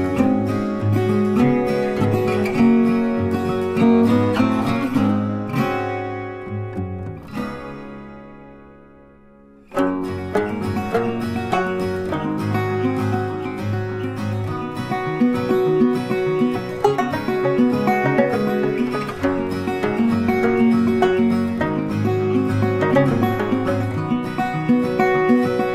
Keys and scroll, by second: 0.5 ctrl+c, 0.7 ctrl+f, 3.6 BackSpace, 14.5 BackSpace, 22.0 ctrl+shift+[.